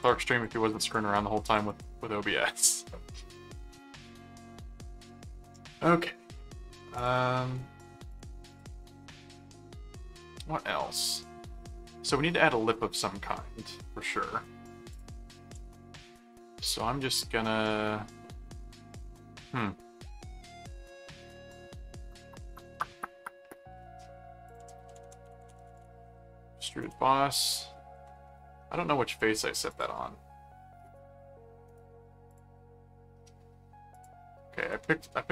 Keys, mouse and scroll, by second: 1.4 click, 6.9 click, 8.1 click, 9.0 middle click, 9.9 middle click, 10.8 middle click, 14.4 middle click, 14.9 click, 15.5 s, 24.3-26.1 typing, 24.5 click, 26.8 Return, 29.1 click, 29.8 click, 31.6 right click, 32.3 click, 33.9 click.